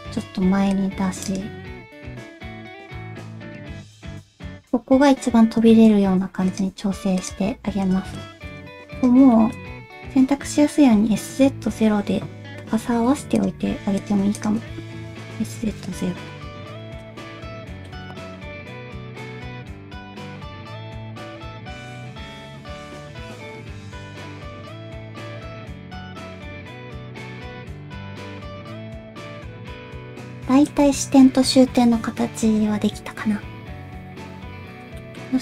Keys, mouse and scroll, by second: 0.2 alt+a, 0.5 c, 1.6 r, 2.3 g, 3.7 g, 5.8 middle click, 6.7 g, 8.0 middle click, 9.3 middle click, 11.1 s, 15.1 s, 16.8 middle click, 17.2 alt+z, 17.6 middle click, 18.1 KP_1, 18.3 alt+z, 18.5 shift+middle click, 19.3 s, 20.8 s, 22.0 middle click, 22.0 s, 22.3 click, 22.8 s, 24.8 alt+z, 24.8 s, 25.4 shift+middle click, 25.9 g, 27.7 middle click, 27.9 alt+z, 28.1 middle click, 28.7 alt+z, 28.7 KP_1, 29.2 shift+middle click, 29.4 alt+z, 30.7 shift+middle click, 35.1 shift+middle click.